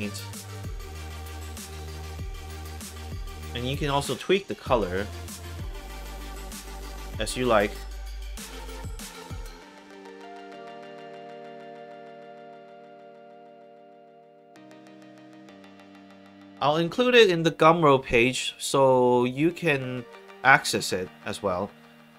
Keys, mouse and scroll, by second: 2.8 click, 4.4 click, 8.8 click, 9.7 alt+right click, 10.1 alt+click, 10.9 alt+click, 12.9 scroll down 2, 13.2 middle click, 14.1 scroll down 2, 14.5 middle click.